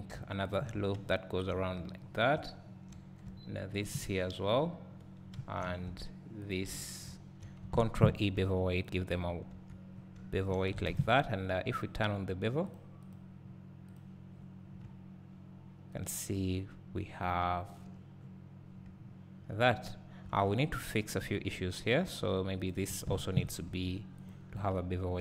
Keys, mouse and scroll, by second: 0.5 shift+click, 1.9 scroll up 1, 2.3 `, 3.8 shift+click, 4.1 scroll down 1, 4.8-5.3 scroll up 1, 5.3 `, 6.5 shift+click, 7.2 `, 8.2 ctrl+e, 9.3 scroll up 2, 10.0 scroll down 2, 11.8 click, 12.7 click, 14.1 click, 14.6 scroll down 1, 14.9 `, 18.2 scroll down 1, 18.7 scroll up 1, 19.9 scroll up 2, 20.4 Tab, 20.9 scroll down 1, 21.3 `, 21.8-22.7 scroll up 1, 22.7 click, 23.7 ctrl+e, 25.0 scroll down 1.